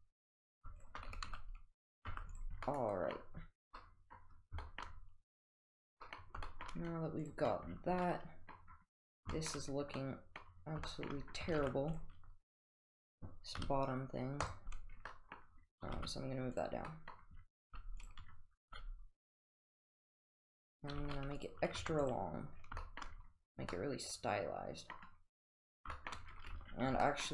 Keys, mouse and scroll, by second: 0.8 shift+click, 1.1 s, 2.1 Tab, 2.3 click, 2.7-3.1 middle drag, 3.8-4.2 middle drag, 4.6 shift+middle click, 5.4 click, 6.0 middle drag, 6.5 shift+middle drag, 8.0-8.6 middle drag, 9.3 shift+middle drag, 10.0-10.4 middle drag, 10.9 shift+middle click, 11.6 Tab, 12.0 click, 13.6 3, 14.5 click, 15.1 middle drag, 15.9 g, 16.9 middle drag, 17.1 scroll down 1, 17.6 g, 18.6 g, 21.0 g, 22.6 Tab, 22.8 shift+middle click, 23.7-25.0 middle drag, 26.0 shift+middle drag, 26.6 Tab, 27.0 middle drag.